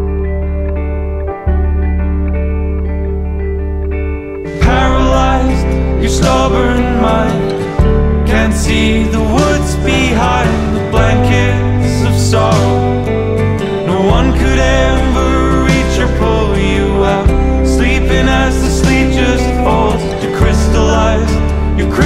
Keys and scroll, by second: 0.4 super+=, 0.9 super+-, 1.2 super+-, 2.1 super+z, 8.0 super+-, 8.5 super+=, 9.0 super+z, 13.6 super+-, 13.8 super+=, 14.6 super+=, 17.2 super+-, 17.5 super+-, 18.0 super+z, 18.8 super+-, 19.7 super+-, 20.0 super+=, 20.1 super+z, 20.4 super+-.